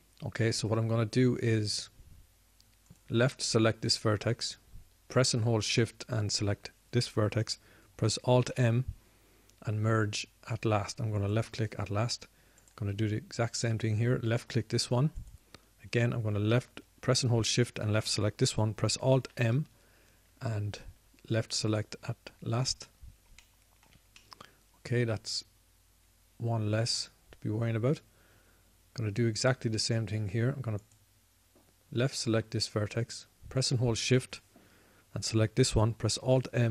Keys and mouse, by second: 4.8-10.2 drag, 10.2 alt+m, 20.9 alt+m, 24.6-25.9 middle drag, 26.5-28.0 middle drag, 28.2 middle click, 29.8 middle click.